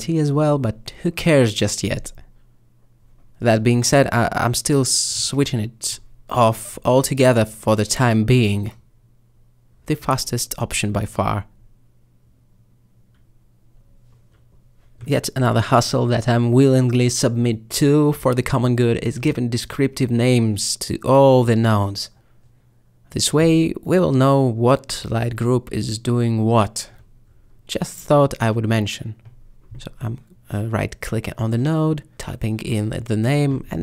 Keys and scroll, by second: 1.9 m, 3.7 m, 6.0 m, 6.7 m, 9.3 m, 23.9 ctrl+alt+m, 24.5 m, 29.6-30.6 typing, 32.7 Return.